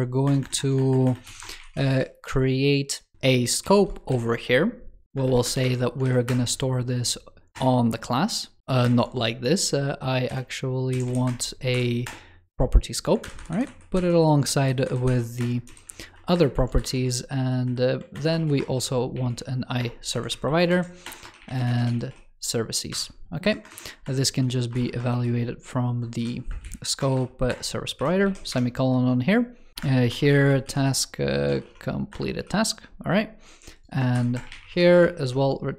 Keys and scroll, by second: 4.0 super+Left, 5.9 super+Left, 6.1 super+Return, 8.6 super+z, 8.7 super+Return, 13.1 super+Up, 16.8 super+d, 18.0 alt+BackSpace, 20.6 alt+Right, 20.9 alt+BackSpace, 23.6 shift+super+Right, 28.1 super+s.